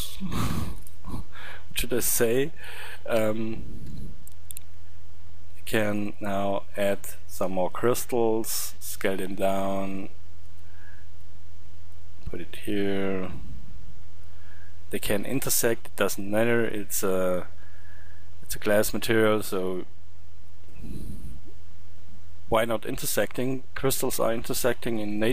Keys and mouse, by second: 0.2 shift+d, 3.0 r, 5.8 drag, 8.7 s, 10.3 click, 17.7-18.1 middle drag, 18.4-18.9 middle drag.